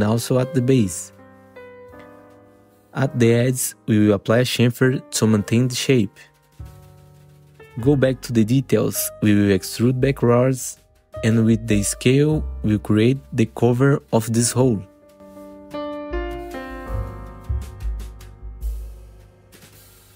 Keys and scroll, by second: 1.6 F3, 2.3 2, 5.0 ctrl+shift+c, 7.3 F3, 7.9 F3, 9.1 F4, 9.5 3, 14.0 r, 15.4 f, 17.4 F3.